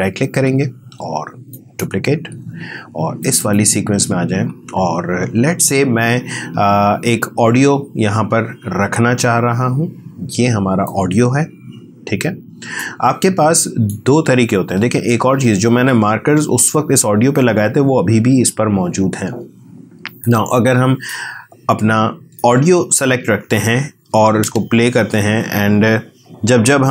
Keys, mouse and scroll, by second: 1.5 click, 9.5-10.8 scroll up 2, 10.8-14.5 drag, 14.5 scroll down 2, 20.2-22.4 drag, 23.1 scroll down 2, 24.4 space.